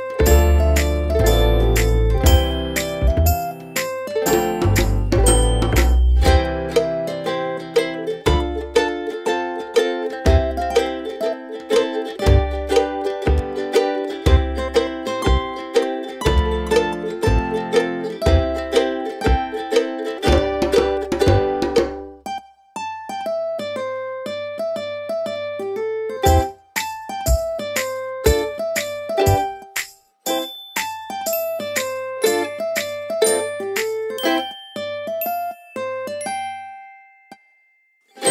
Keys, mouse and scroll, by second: 1.1 alt+click, 4.7 shift+click, 9.6-10.9 scroll down 1, 10.9 click, 33.5 click.